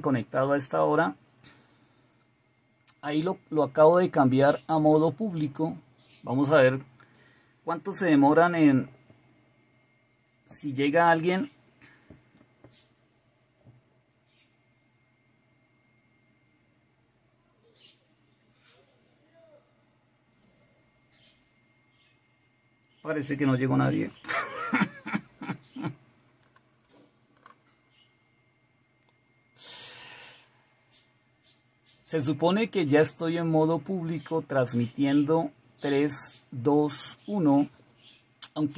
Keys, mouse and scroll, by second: 26.6 alt+super+KP_2.